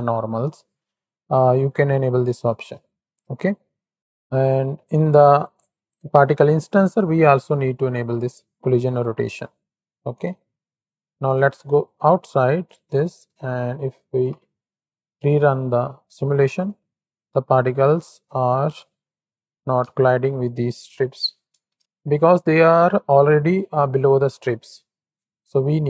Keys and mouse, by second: 6.8 click, 9.2 click, 10.1 click, 11.5 Tab, 12.7 click, 14.0 shift+Right, 14.2 shift+Left, 15.3 space, 16.3 space, 17.4 click, 19.7 KP_1, 20.7 ctrl+KP_3.